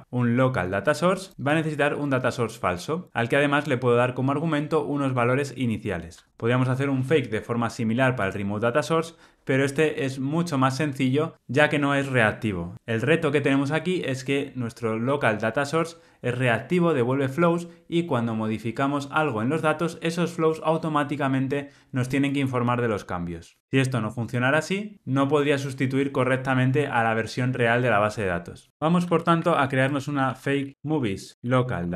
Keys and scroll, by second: 8.3 super+b, 28.7 shift+super+z.